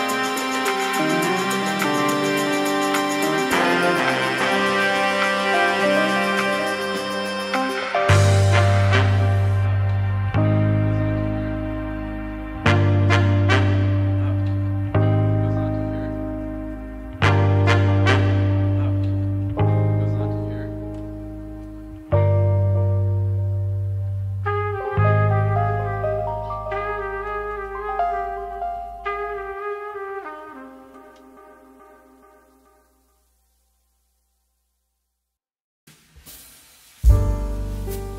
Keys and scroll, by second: 0.4 space, 3.6 Delete, 5.2 Delete, 8.3 space, 12.5 space, 21.7 ctrl+h, 21.9 ctrl+space, 26.2 2, 28.8 space, 31.4 Return, 33.5 ctrl+k, 35.0 ctrl+k, 35.4 ctrl+h.